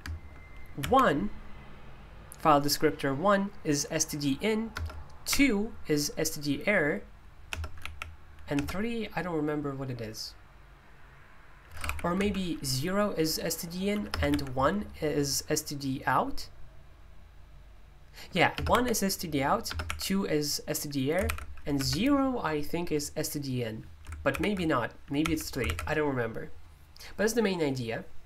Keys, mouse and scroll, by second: 4.7 BackSpace, 5.3 BackSpace, 7.5 BackSpace, 7.9 3, 11.8 ctrl+u, 12.2 0, 14.3 1, 18.5 BackSpace, 18.7 1, 19.8 BackSpace, 21.3 ctrl+u, 21.8 0, 24.3 ctrl+u, 25.2 3, 25.7 ctrl+u.